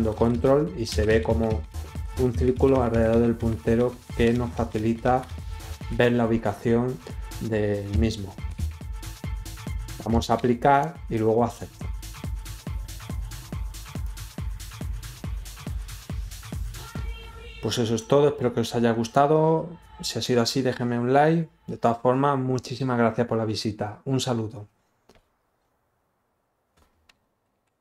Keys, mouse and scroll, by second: 10.5 click, 14.0 click.